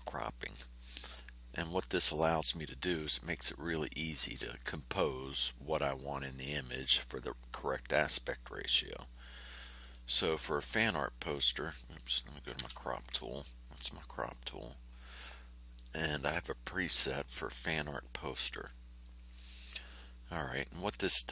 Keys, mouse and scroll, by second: 0.5 ctrl+scroll up 2, 1.4-2.2 ctrl+scroll down 4, 2.4 ctrl+scroll up 2, 9.8 click, 11.6 click, 12.5 y, 15.7 click, 18.5 click.